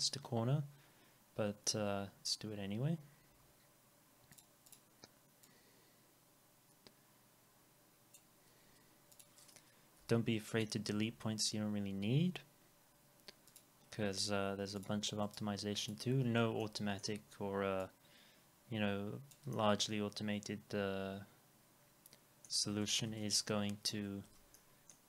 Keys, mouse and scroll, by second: 3.3 F4, 3.8 scroll, 3.9 scroll up 1, 4.7 double click, 15.2 right click, 19.5 alt+middle click, 22.7 alt+middle click, 24.6 alt+middle click.